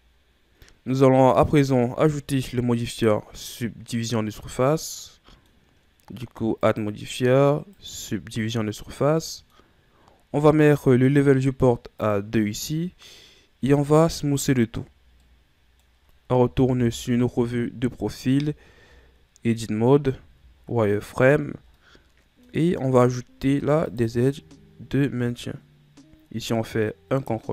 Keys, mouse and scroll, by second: 1.7 Tab, 2.0-6.6 middle drag, 6.8-8.9 drag, 8.9-12.0 middle drag, 12.2-13.9 drag, 13.9 w, 15.5-16.9 middle drag, 16.9 KP_3, 18.5 Tab, 19.8-20.5 scroll up 1, 20.5 z, 21.6-22.0 scroll down 3, 22.0-23.6 middle drag, 23.6 ctrl+r.